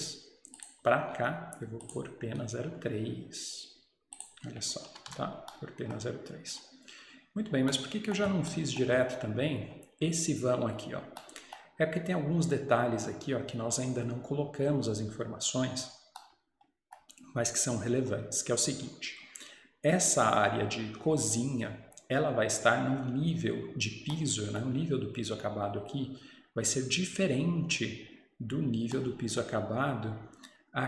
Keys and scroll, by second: 5.0 Escape, 5.1 Escape.